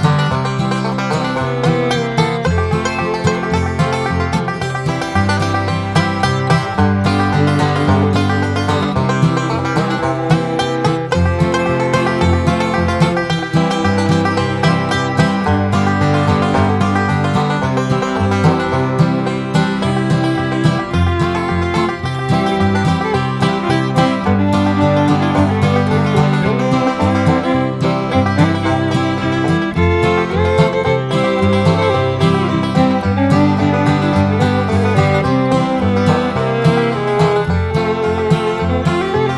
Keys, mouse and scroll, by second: 0.1 click, 0.5 Escape, 0.8 click, 3.0 click, 4.2 click, 5.1 click, 6.1-7.5 typing, 7.7 click, 9.3 click, 10.6 click, 11.8 click, 12.9 click, 13.2 middle click, 13.6 Escape, 14.1 click, 17.1 click, 18.7 click, 19.6 click, 21.1 click, 21.5 Escape, 22.1 click, 23.4 click, 24.9 click, 25.7-26.7 typing, 26.7 click, 27.7 click, 28.3 click, 31.1 click, 32.7 click, 37.0 click, 37.6 click, 39.1 click.